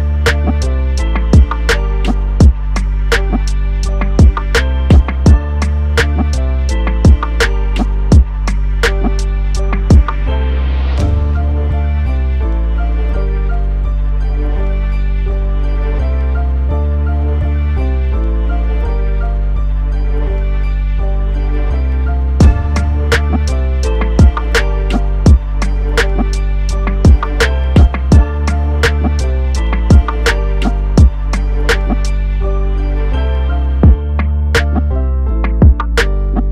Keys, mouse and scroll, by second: 0.2 click, 1.4 i, 6.7 click, 8.0 i, 11.3 click, 16.0 click, 18.5 typing, 19.9 click, 24.8 click, 26.9 g, 27.8 x, 31.6 click, 33.9 i, 35.3 click.